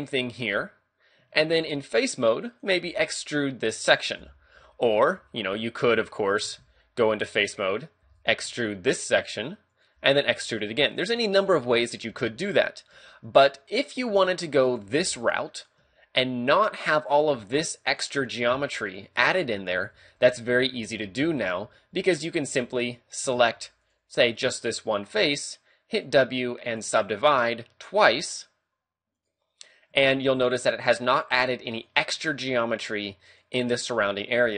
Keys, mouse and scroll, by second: 0.2 click, 1.2 ctrl+Tab, 2.5 right click, 2.8 e, 4.2 right click, 4.6 ctrl+z, 4.9 ctrl+z, 5.2 ctrl+z, 5.5 ctrl+z, 5.9 ctrl+z, 6.6 ctrl+Tab, 7.5 right click, 8.0 e, 8.3 right click, 8.4 s, 9.8 click, 10.0 e, 11.0 right click, 11.2 ctrl+z, 11.5 ctrl+z, 12.2 ctrl+z, 13.0 a, 14.1 ctrl+r, 14.8 click, 15.0 ctrl+r, 15.7 click, 15.8 a, 16.8 right click, 17.4 shift+right click, 17.9 right click, 19.0 shift+right click, 19.5 a, 20.0 ctrl+z, 20.2 ctrl+z, 20.5 ctrl+z, 20.8 ctrl+z, 21.1 ctrl+z, 21.3 ctrl+z, 21.6 ctrl+z, 21.9 ctrl+z, 22.5 a, 23.4 ctrl+Tab, 24.1 right click, 26.0 w, 29.2 click, 29.9 a, 31.1 right click, 31.7 shift+right click, 32.1 a, 32.3 middle click, 33.3 right click, 34.0 right click, 34.3 a.